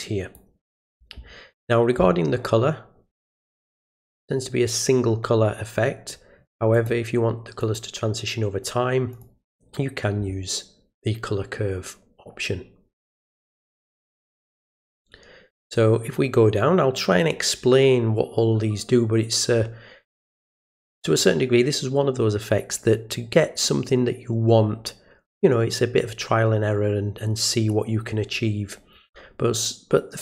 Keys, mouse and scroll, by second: 3.1 click, 6.7 click, 7.6 click, 9.1 right click, 13.6 click.